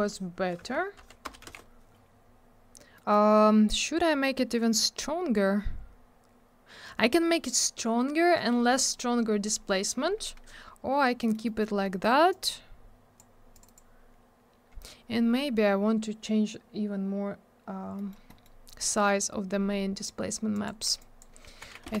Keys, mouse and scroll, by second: 0.6 Tab, 1.0 Right, 1.2 BackSpace, 1.4 2, 1.4 Return, 2.9 middle click, 3.1 middle click, 3.7-4.2 scroll up 1, 5.1 scroll down 1, 6.3-7.1 scroll up 1, 7.1 scroll down 1, 11.2 middle click, 11.3 middle click, 11.4 middle click, 11.6 double middle click, 11.8 middle click, 12.0 middle click, 12.3 click, 13.5 click, 13.6 click, 13.6 click, 13.7 double click, 17.9 middle click, 18.1 middle click, 18.2 middle click, 18.4 double middle click, 20.5 click, 20.6 click, 21.0 click, 21.6 2, 21.8 Return.